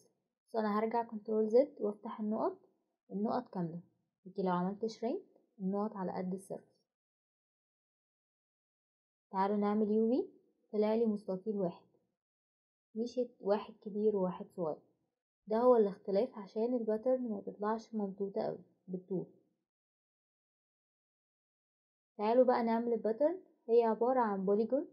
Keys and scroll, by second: 3.2 Escape, 3.2 typing, 7.3 Escape.